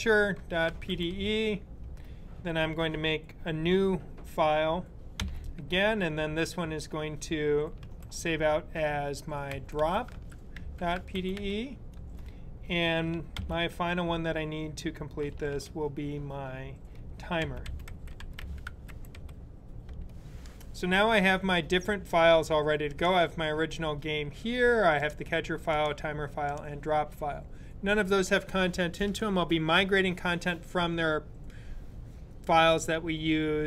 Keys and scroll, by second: 0.0-1.4 typing, 5.0 n, 7.6 super+s, 9.1-11.7 typing, 15.3 super+s, 17.0-19.5 typing.